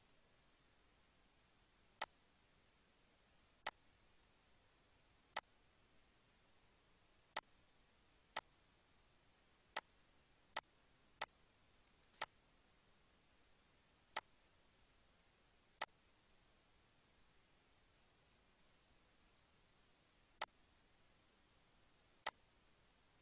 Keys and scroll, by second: 11.7 ctrl+s.